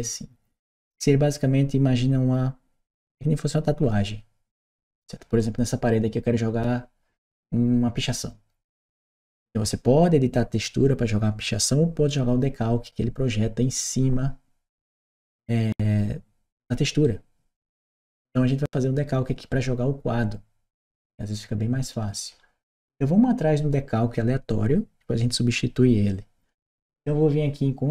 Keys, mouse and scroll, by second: 5.2 right click, 16.8-18.2 right drag, 27.7 click.